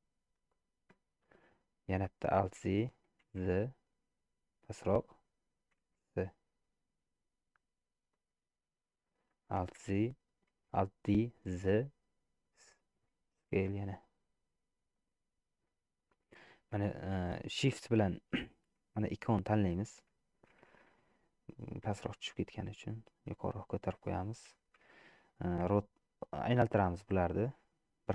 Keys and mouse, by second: 2.5 alt+d, 5.8 s, 9.7 alt+d, 13.6 s, 21.9 g, 25.7 r, 27.4-28.1 middle drag.